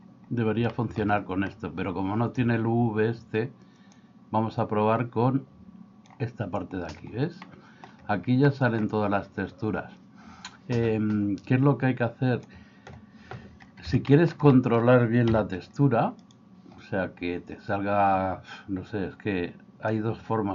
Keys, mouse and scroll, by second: 0.8 shift+middle click, 4.1 click, 4.5-6.2 drag, 7.5 middle click, 8.5 middle click, 12.5 click, 14.1 shift+middle click, 14.6 middle click, 15.3 a, 20.0-20.5 drag.